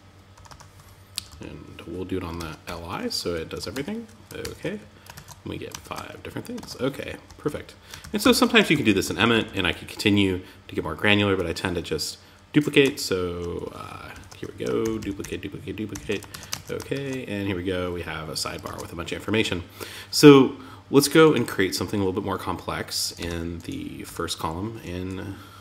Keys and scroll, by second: 0.5 Left, 2.9 super+Right, 3.1 Tab, 3.8 super+s, 4.5 super+Tab, 5.2 super+r, 5.9 super+Tab, 6.6 Up, 7.4 super+Left, 8.1 shift+Down, 13.5 shift+Down, 14.2 shift+super+d, 15.7 super+s, 15.9 super+Tab, 16.3 super+r, 18.0 super+Tab, 22.5 Return, 23.5 Return.